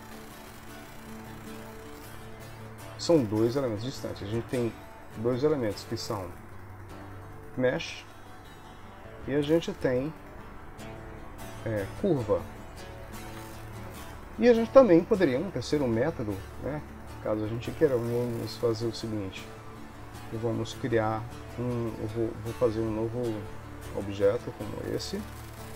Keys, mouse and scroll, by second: 3.0 click, 3.3 click, 6.0 click, 9.3 click, 12.9 ctrl+s, 13.4 Tab, 13.9 Tab, 17.9 click, 24.7 shift+d.